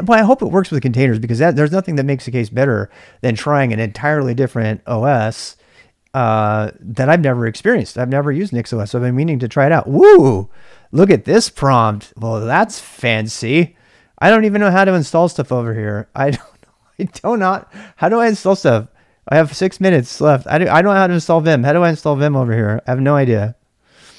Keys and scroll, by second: 0.0-24.1 typing.